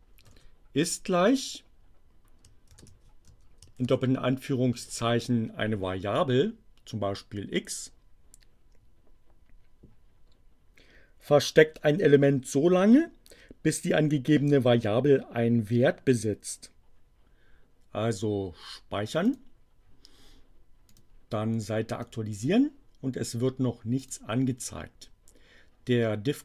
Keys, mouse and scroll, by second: 0.3 shift+0, 2.6 shift+2, 3.3 x, 3.7 shift+2, 4.8 space, 19.2 click, 20.8 click, 22.0 click, 24.0 click.